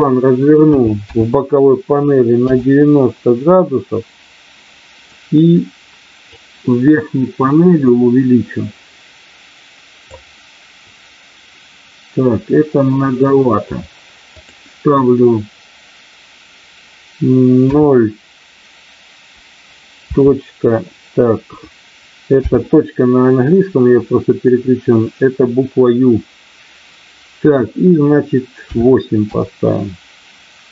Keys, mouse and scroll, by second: 6.2-11.9 drag, 14.3-30.7 drag.